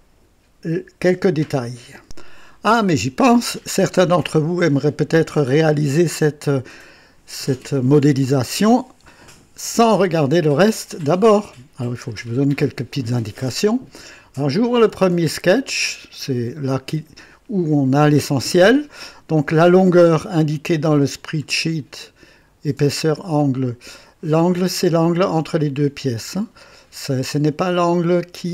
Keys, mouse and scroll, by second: 2.0 click, 15.5 click, 21.1 click, 27.9 click.